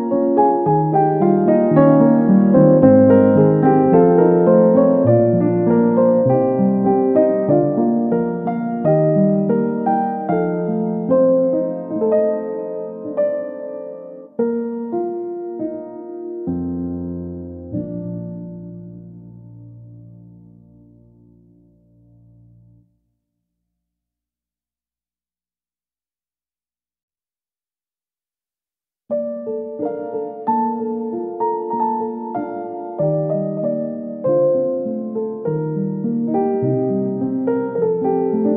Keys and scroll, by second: 10.5 ctrl+c, 11.0 ctrl+shift+v, 14.8 Delete, 19.7 Delete, 21.0 Delete, 21.4 ctrl+c, 21.7 ctrl+v, 33.8 Left, 34.5 Down, 36.6 Down, 37.0 Right, 37.2 Down.